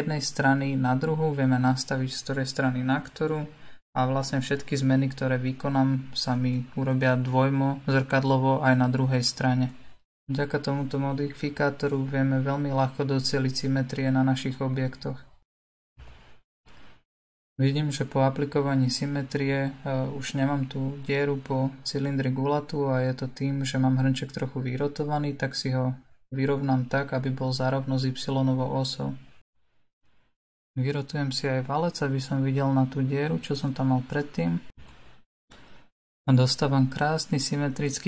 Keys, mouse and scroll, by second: 15.5 click, 16.1-19.1 middle drag, 19.1 click, 20.8 click, 23.0-25.6 drag, 25.6-29.1 middle drag, 29.1 click, 30.8 click, 32.0 click, 32.8 r, 33.9 click, 34.6 r.